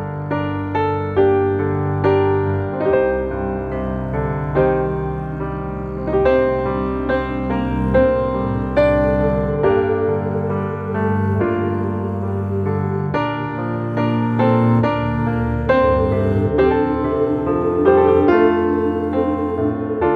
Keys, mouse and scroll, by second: 0.5 click, 1.0 s, 3.2 click, 4.1 s, 5.5 click, 6.3 s, 7.6 click, 8.2 s, 9.5 click, 10.3 s, 13.1 click, 14.3 click, 14.9 s, 19.6 click, 20.0 middle click.